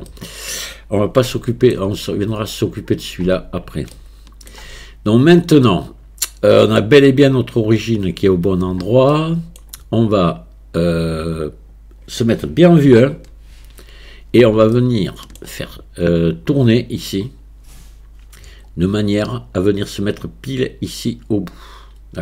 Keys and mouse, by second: 0.1-0.6 middle drag, 1.3-1.8 shift+middle drag, 4.0-4.6 shift+middle drag, 5.8-6.8 middle drag, 9.2 middle click, 11.6 click, 12.9 KP_1, 14.8-15.4 shift+middle drag.